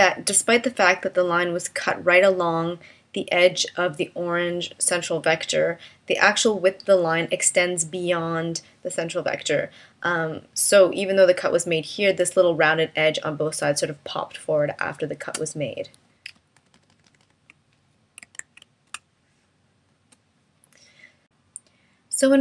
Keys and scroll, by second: 16.5 super+-, 18.9 space.